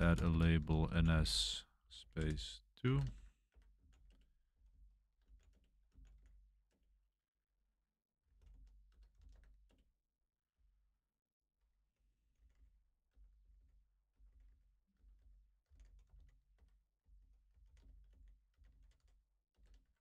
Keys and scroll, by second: 0.0-6.6 typing, 7.9-16.6 typing, 9.6 Return, 17.8-20.0 typing.